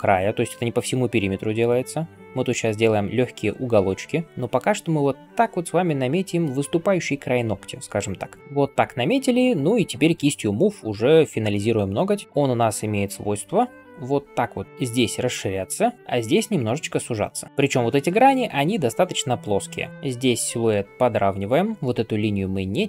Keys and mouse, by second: 12.6 ], 14.3 ], 17.7-18.8 typing.